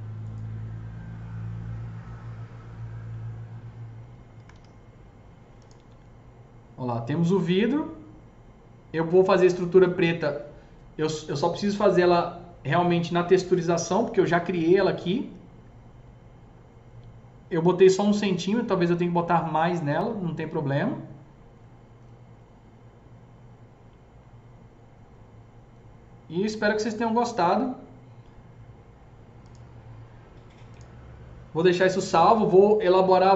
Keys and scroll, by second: 4.0 F3, 4.4 F3, 4.4 F4.